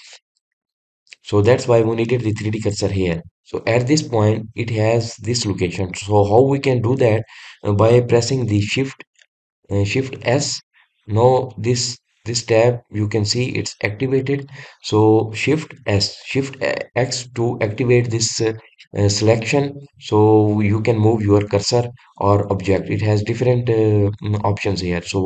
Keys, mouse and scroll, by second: 4.0-4.5 scroll down 1, 4.6-7.6 scroll down 9, 7.8 scroll up 2.